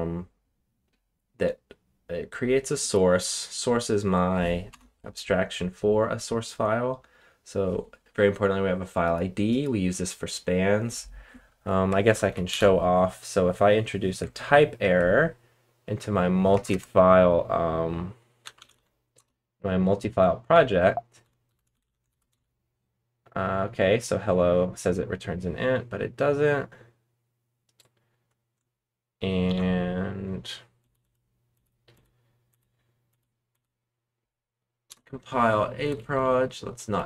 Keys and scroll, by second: 4.7 Return, 12.3 ctrl+shift+l, 12.5 ctrl+shift+k, 14.2 super+Tab, 16.5 space, 16.6 space, 18.1-19.2 typing, 20.2-22.5 typing, 29.4 ctrl+shift+k, 30.7 Up, 31.0 Up, 31.5 Up, 31.9 Up, 32.5 Up, 33.0 Up, 33.5 Up, 34.8 Return, 35.8 Up, 35.9-36.9 Left.